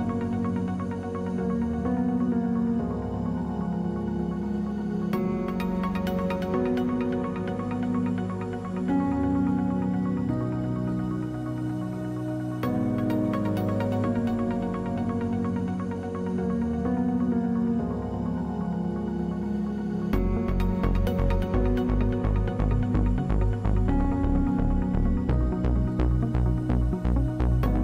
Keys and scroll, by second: 2.4 ctrl+z.